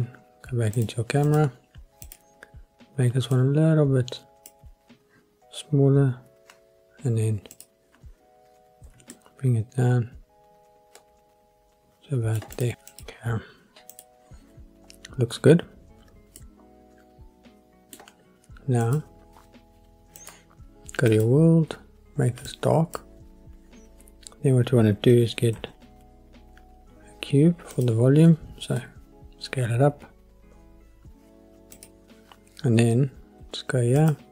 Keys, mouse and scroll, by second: 0.8 click, 1.2 click, 2.0 click, 3.3 click, 7.5 click, 8.8 g, 9.1 middle click, 12.9 click, 13.9 click, 16.4-18.0 middle drag, 18.8 click, 20.2 click, 21.1 click, 27.8 shift+a, 28.8 s, 31.8 click, 34.0 click.